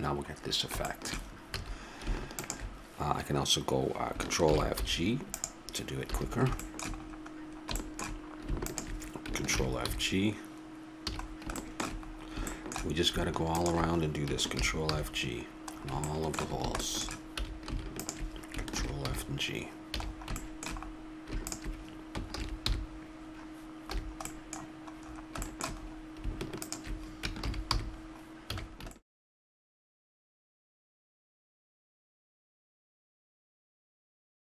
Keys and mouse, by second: 1.9 a, 2.7-4.6 drag, 4.8 ctrl+f, 6.4 a, 6.5 click, 7.2 middle click, 9.0 middle click, 9.8 click, 9.9 ctrl+f, 9.9 middle click, 10.0 click, 11.3 a, 12.8 middle click, 13.8-15.6 drag, 14.9 ctrl+f, 17.7 a, 18.3-19.5 drag, 19.1 ctrl+f, 20.2 a, 20.7 middle click, 21.7-23.5 drag, 22.7 ctrl+f, 24.3 a, 26.9-28.1 drag, 27.8 ctrl+f, 28.8 a, 29.5 click, 29.7 click, 29.8 ctrl+f, 30.0 a, 30.8 click, 31.5 ctrl+f, 31.7 a, 32.3 click, 32.5 ctrl+f, 32.7 a, 33.2 click, 33.4 ctrl+f, 33.6 a, 33.8 middle click, 34.1 click, 34.3 ctrl+f.